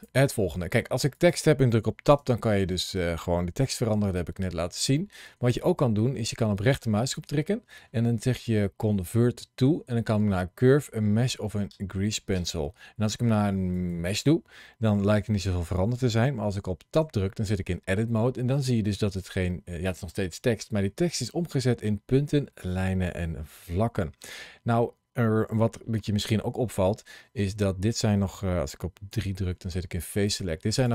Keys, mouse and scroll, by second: 0.4 shift+middle click, 1.0 click, 2.0 Tab, 2.7 Tab, 3.3 scroll up 1, 4.0 middle click, 6.4 right click, 15.2-16.8 scroll up 2, 16.8 Tab, 18.1-22.8 scroll up 2, 23.6-25.3 scroll down 1, 25.5 shift+middle click, 29.1 3, 30.1 click, 30.6 click.